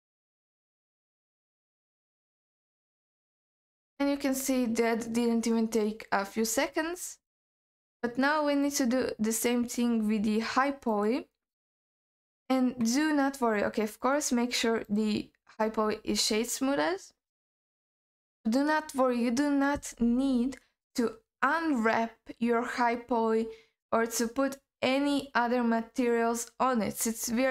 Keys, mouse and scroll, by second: 3.0-3.7 scroll down 4, 3.7 scroll up 2, 3.9 scroll down 1, 4.2 scroll up 2, 4.4 scroll down 2, 4.7-5.5 scroll up 2, 8.6 click, 9.4-10.9 scroll down 3, 10.9 click, 12.0 click, 14.0 right click, 15.2 click, 15.6-16.7 scroll up 4, 16.7-17.9 scroll down 3, 17.9-20.2 scroll down 1.